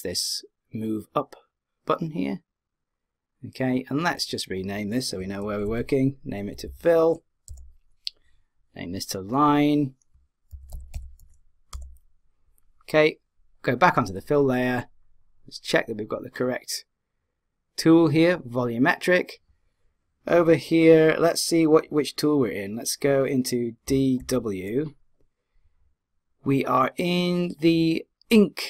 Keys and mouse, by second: 2.7-6.2 drag, 6.7 l, 9.3 click, 13.7-17.0 drag, 23.8 d, 24.2 w.